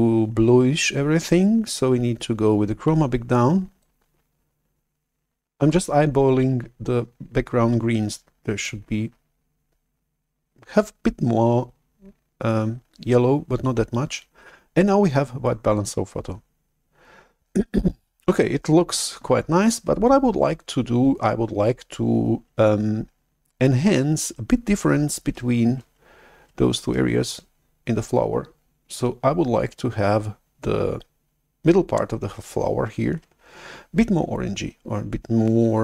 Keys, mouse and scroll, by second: 3.8-7.0 drag, 8.6-12.1 drag, 15.8-18.2 drag.